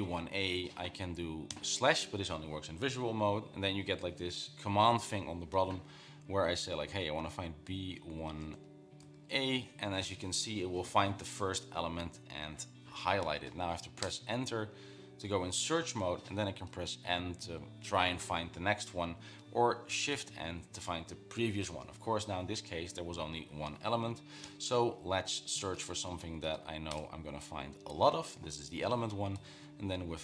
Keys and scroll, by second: 7.4-9.6 typing, 17.2 n, 20.6 shift+n, 24.9 l, 26.0-27.5 typing, 29.8-30.2 typing.